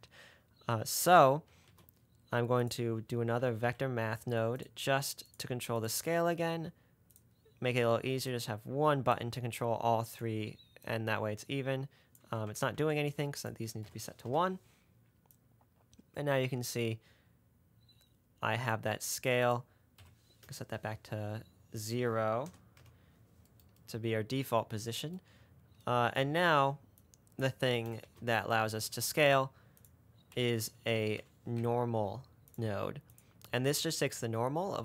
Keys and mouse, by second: 1.9 shift+a, 7.4 drag, 18.1 middle click, 19.0 middle click, 19.5 middle click, 20.9-22.2 middle drag, 23.1 middle click, 27.2 click, 28.3 shift+a.